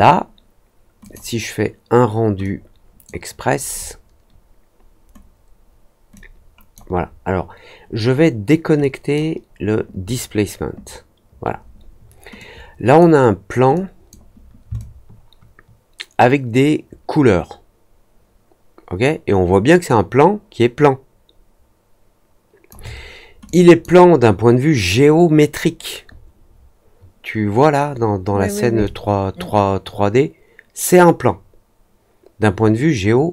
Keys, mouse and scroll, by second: 1.0 click, 2.4-3.0 drag, 6.1 click, 8.7 click, 12.3 click, 13.7 click, 14.7-22.6 alt+drag, 23.4 click, 28.8-33.3 alt+drag.